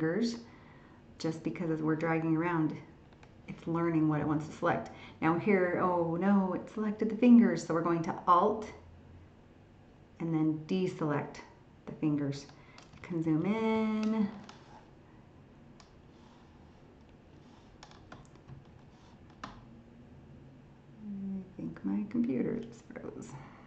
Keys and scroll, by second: 13.0 ctrl++.